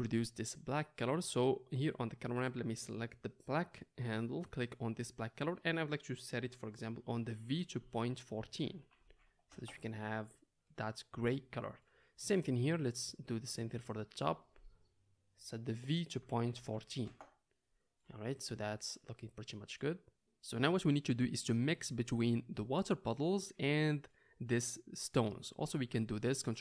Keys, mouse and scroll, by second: 4.9-12.9 middle drag, 12.9 click, 14.4-26.6 middle drag.